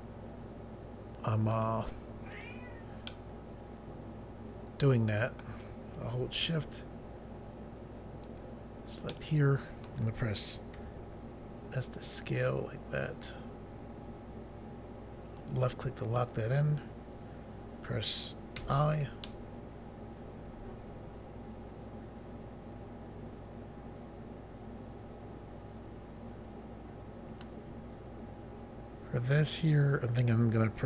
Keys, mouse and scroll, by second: 2.3 click, 2.4 click, 3.1 middle click, 8.2 shift+click, 9.1 middle click, 10.7 s, 15.4 click, 16.7 click, 18.6 i, 19.2 middle click, 29.3 click, 29.4 click.